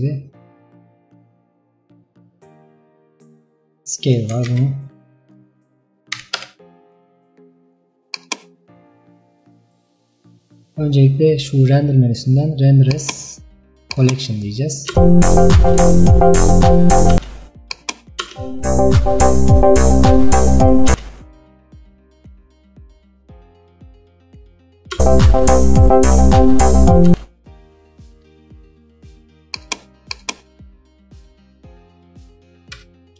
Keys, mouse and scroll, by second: 0.0-4.6 drag, 4.6 ctrl+z, 6.5-15.0 drag, 15.0 space, 17.2 space, 17.8 click, 18.3 space, 21.0 space, 24.4 click, 25.0 space, 27.2 space, 27.9-28.5 scroll down 1, 28.5-29.6 shift+middle drag, 29.6-31.0 drag, 31.2 scroll up 2, 31.7 middle click, 32.5 KP_0.